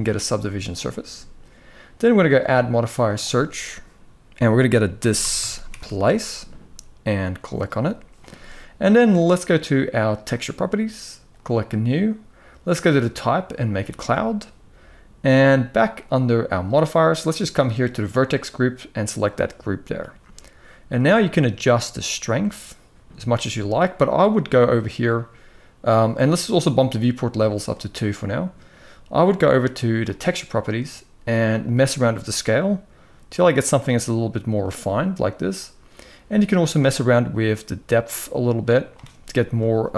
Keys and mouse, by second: 2.0-7.4 drag, 11.1 click, 12.6-13.5 drag, 17.8-19.1 drag, 21.1-22.9 shift+drag, 27.4 click, 29.7 click, 31.4-34.3 shift+drag, 36.5-38.6 shift+drag.